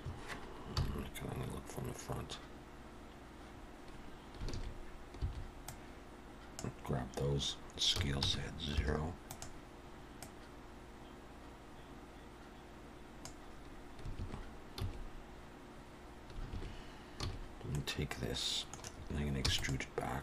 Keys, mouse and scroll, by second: 0.8 KP_1, 1.5 scroll up 2, 4.5 alt+a, 5.2 b, 7.9 s, 10.2 click, 14.2 alt+a, 14.8 a, 16.5 alt+a, 17.2 a, 17.7 middle click, 19.4 e.